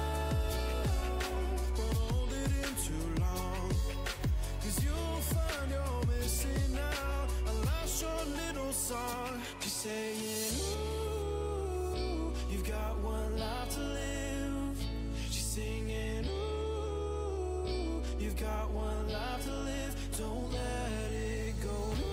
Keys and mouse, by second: 3.8 Tab, 4.3 Tab, 5.1 ctrl+z, 5.4-5.9 ctrl+z, 6.1 ctrl+z, 6.3 ctrl+z, 8.0 KP_1, 20.8-22.1 right drag.